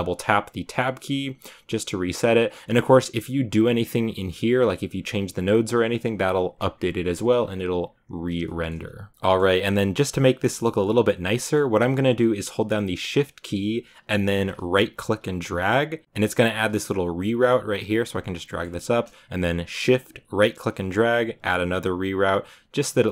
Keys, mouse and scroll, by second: 8.3 shift+middle click, 9.1-15.5 drag, 16.0-20.5 right drag, 21.7-23.0 right drag, 23.0-23.1 drag.